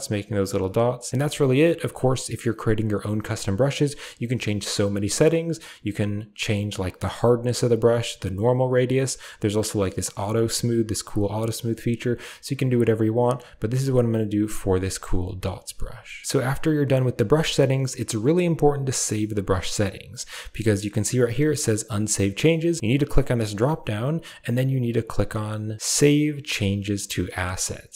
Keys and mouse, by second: 0.4 ctrl+z, 14.5 click, 15.3 ctrl+z, 16.1 shift+middle click, 23.1-25.0 drag, 25.7-27.4 drag.